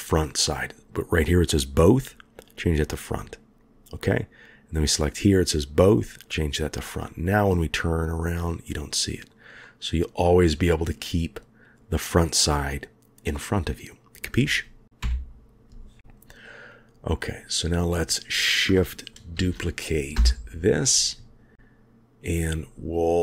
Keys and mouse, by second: 2.4 click, 4.0 click, 6.3 click, 7.1-9.3 middle drag, 9.6-14.2 middle drag, 15.0 KP_1, 16.7 click, 19.3 shift+d.